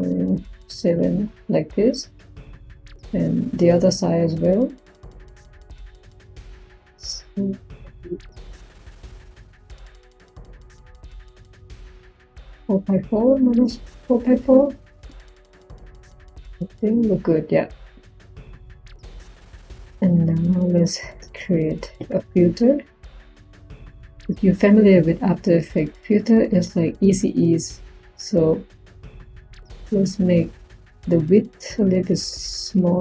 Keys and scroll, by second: 21.0 Tab, 21.8 f, 22.2 i.